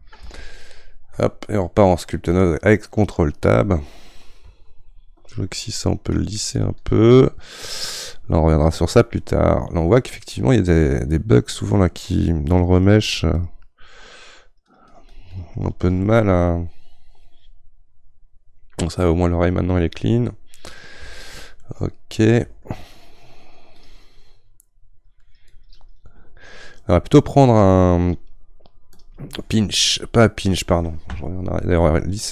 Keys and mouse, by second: 1.2 ctrl+Tab, 4.6-8.6 shift+drag, 8.6-11.7 middle drag, 11.7-16.0 shift+drag, 16.0-19.0 middle drag, 21.6-23.8 middle drag, 23.8-32.3 drag.